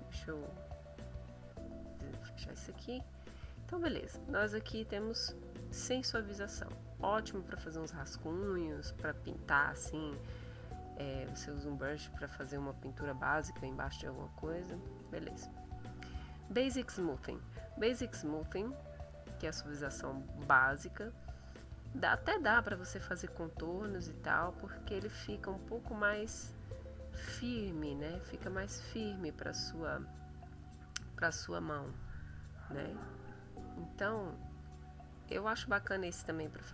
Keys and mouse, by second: 0.4 click, 1.1 click, 2.5 click, 5.8 click, 7.3 click, 15.0 click, 15.6 click, 18.8 click, 21.3 click, 22.3-26.3 drag, 26.6-28.1 drag, 28.5 click, 29.9-31.4 drag, 31.6 click, 32.3 click.